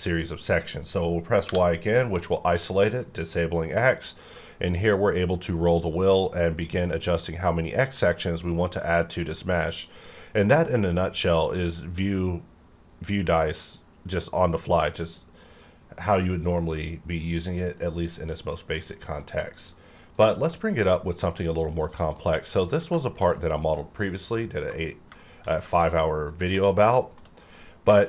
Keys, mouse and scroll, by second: 3.5 y, 3.8-4.2 scroll down 1, 4.2-4.7 scroll up 1, 4.7-5.2 scroll down 1, 5.2-5.6 scroll up 1, 5.6-6.0 scroll down 1, 6.0 middle click, 6.7-7.1 scroll up 1, 7.1-7.4 scroll down 1, 7.4-9.7 scroll up 1, 9.7 click, 19.2 click, 20.3 click, 21.2 scroll down 1, 21.7 click, 22.2 middle click, 22.7 scroll down 1, 23.0 shift+middle click, 23.7 scroll down 1, 24.3 middle click, 24.8-25.1 scroll up 1, 25.2 shift+middle click, 25.7 shift+middle click, 26.7 scroll up 1, 27.0 shift+middle click, 27.3-28.0 shift+scroll up 2.